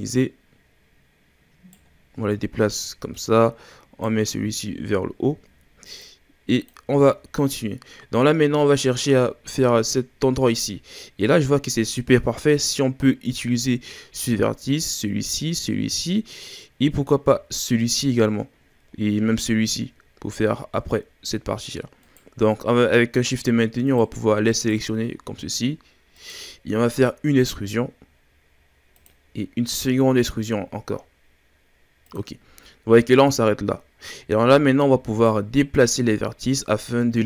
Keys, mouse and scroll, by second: 0.0 right click, 1.9-2.5 scroll down 4, 2.5-3.1 scroll up 2, 3.1 right click, 4.6-5.3 scroll down 3, 5.3-5.9 scroll up 1, 5.9-7.0 drag, 7.0-7.5 shift+scroll down 4, 7.5-8.3 scroll up 2, 8.3-8.6 scroll down 2, 8.6-10.7 ctrl+scroll up 4, 22.0 right click, 23.9 shift+right click, 24.6 shift+right click, 25.4 shift+right click, 26.2 shift+right click, 27.3 e, 29.7 e, 34.1-34.6 scroll up 2, 34.6 shift+scroll down 2, 35.2 right click, 35.7-37.2 drag.